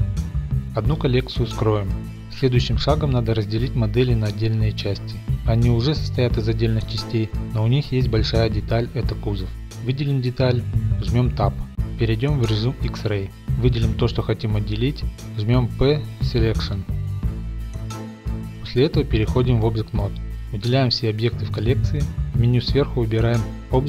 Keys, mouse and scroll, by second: 0.0-0.3 typing, 0.3 click, 0.4 scroll, 0.8 click, 2.0 click, 3.1 middle click, 3.7 click, 7.1 right click, 7.1 g, 7.5 click, 8.1 middle click, 8.6-8.9 scroll, 10.0 Tab, 10.0 click, 10.6 click, 11.4 click, 11.5-11.9 middle drag, 11.6 z, 11.9 3, 12.1-12.5 middle drag, 12.2 Tab, 12.6-13.0 drag, 12.8 Tab, 13.0-13.5 middle drag, 15.3 click, 15.6 click, 16.6 click, 16.9 click, 17.8 click, 18.2 click, 18.4 Tab, 19.5 z, 20.2 middle click, 20.6 middle click, 21.1 click, 21.4 right click, 22.0 click, 22.3 scroll.